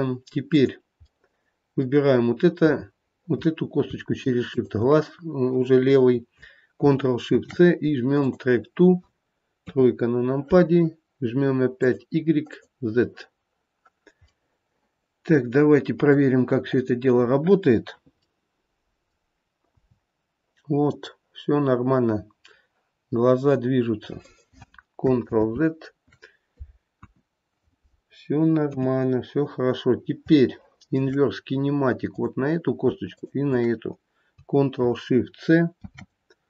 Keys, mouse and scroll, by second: 1.3 click, 1.3 middle click, 4.6 shift+click, 7.4 ctrl+shift+c, 9.8 KP_3, 12.0 click, 12.7 click, 14.4 middle click, 16.1 middle click, 16.8 click, 18.5 middle click, 19.0 middle click, 19.9 g, 25.4 ctrl+z, 27.2 KP_1, 28.8 KP_3, 29.5-30.1 scroll down 3, 30.7 shift+middle click, 31.4-31.9 scroll down 1, 32.2 click, 33.2 shift+click, 35.9 ctrl+shift+c.